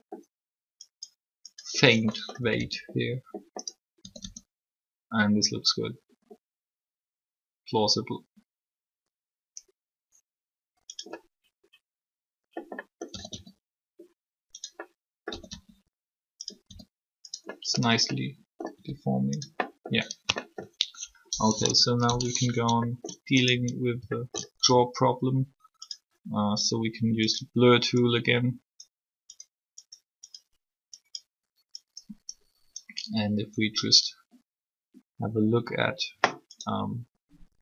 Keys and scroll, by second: 2.4 typing, 4.0 typing, 13.0 typing, 15.3 typing, 16.6 r, 18.7 r, 21.3 3, 24.6 alt+shift+r.